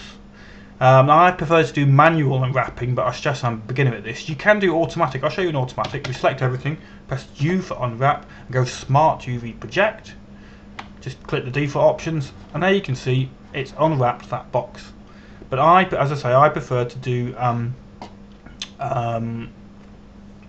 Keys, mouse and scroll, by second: 3.7 right click, 7.5 a, 7.7 a, 9.1 u, 11.4 click.